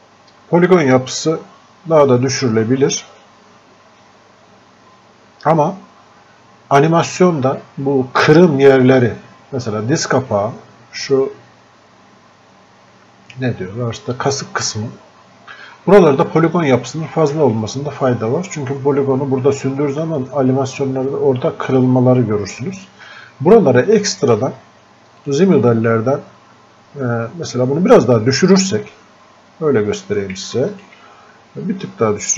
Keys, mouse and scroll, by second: 22.8-23.1 scroll up 1, 23.1 scroll down 1, 25.3 click, 26.3 scroll up 1, 26.7-27.1 scroll down 1, 29.7 scroll up 1, 30.6 alt+click.